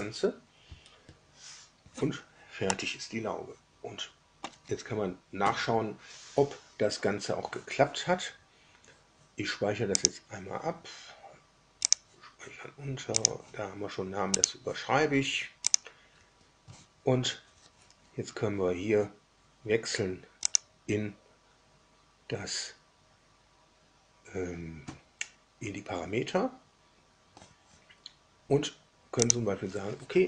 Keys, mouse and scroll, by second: 2.6-4.6 middle drag, 9.9 click, 11.8 click, 13.1 click, 14.3 click, 15.6 click, 20.4 click, 29.2 drag.